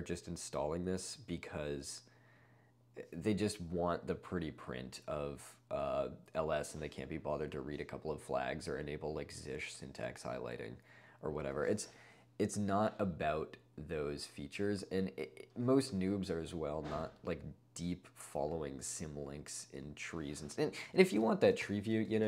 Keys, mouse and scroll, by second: 21.3 alt+a, 21.6 ctrl+l, 22.2 ctrl+space.